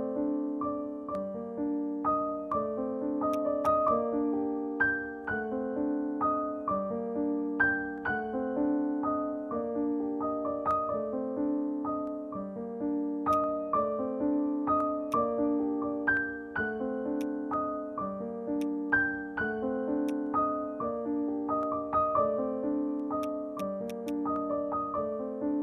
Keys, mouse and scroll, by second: 2.7-3.1 scroll down 1, 3.3 alt+click, 12.5 scroll up 1, 13.3 alt+click, 14.3-14.6 alt+scroll up 2, 14.6 alt+middle click, 14.8 scroll down 1, 15.1 alt+click, 16.9 alt+middle click, 17.2 alt+click, 18.3 alt+middle click, 18.6 alt+click, 19.3 alt+middle click, 23.2 right click, 24.0 double click.